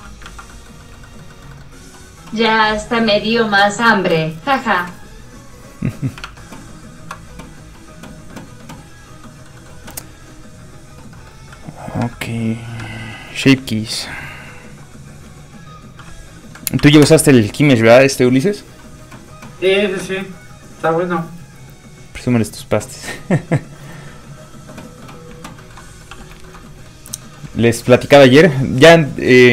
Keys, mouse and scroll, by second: 0.3 ctrl+z, 0.5 middle click, 0.6 middle click, 1.2 shift+middle click, 3.8 click, 3.8 shift+middle click, 3.9 click, 6.3 alt+Tab, 6.9 alt+click, 9.3 middle click, 10.6 click, 11.2 middle click, 12.0 a, 16.8 KP_1, 17.1 Return, 25.6 shift+middle click, 25.8 middle click, 25.9 middle click, 26.1 f, 26.3 shift+click, 26.7 shift+middle click, 26.7 scroll up 1, 26.8 middle click, 27.0 scroll down 1, 27.7 shift+middle click.